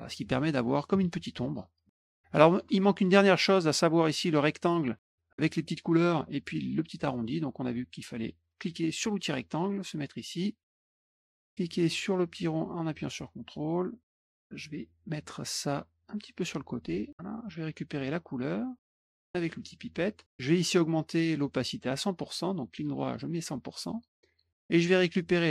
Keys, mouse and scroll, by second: 0.2 middle click, 1.5 middle click, 2.6 middle click, 8.9 click, 10.6 click, 11.9-14.0 drag, 14.6 click, 15.9-17.2 drag, 18.7 click, 19.2 click, 21.6 right click, 22.9 click.